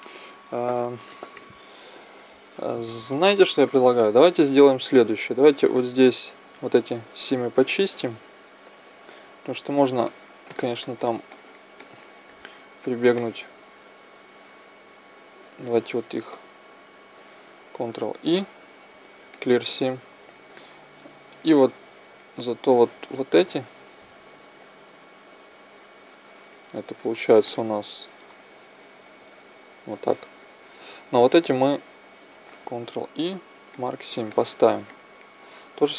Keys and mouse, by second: 10.0-12.4 right drag, 14.2-18.0 right drag, 18.0 ctrl+e, 21.6-27.9 right drag, 26.7 z, 32.8 ctrl+e.